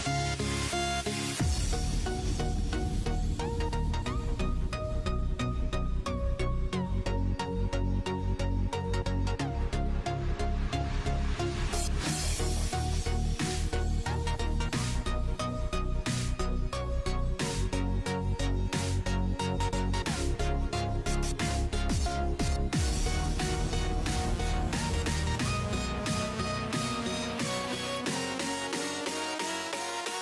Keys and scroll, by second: 0.0-2.5 typing, 3.9-4.9 typing, 6.6-10.1 typing, 22.1-25.7 typing, 27.7 BackSpace.